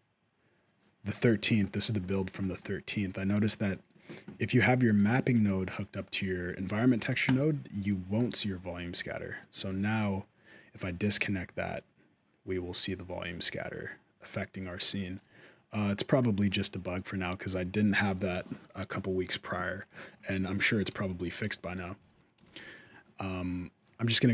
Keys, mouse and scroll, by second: 1.1 middle click, 1.4 shift+middle click, 2.2 middle click, 4.2 right click, 4.6 shift+right click, 4.9 g, 7.0 ctrl+click, 8.7 middle click, 9.5 shift+scroll up 1, 9.7 shift+middle click, 11.0 middle click, 11.6 shift+click, 15.9 click, 16.3 middle click, 17.0 shift+middle click, 18.2 middle click, 19.7 shift+middle click, 20.3 alt+a, 20.7 b, 21.2 g, 21.8 alt+a.